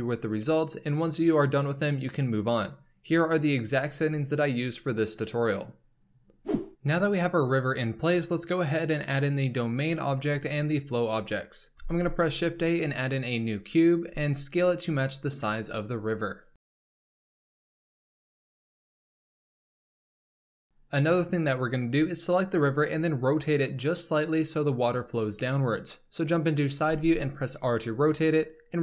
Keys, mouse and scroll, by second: 6.6 middle click, 11.8 shift+a, 14.1 s, 15.8-16.6 middle drag, 16.6-20.3 typing, 17.3 shift+middle click, 19.6-20.1 middle drag, 20.7-21.9 scroll down 3, 21.9 click, 24.1 KP_3, 25.4-26.8 scroll up 2, 26.8 r.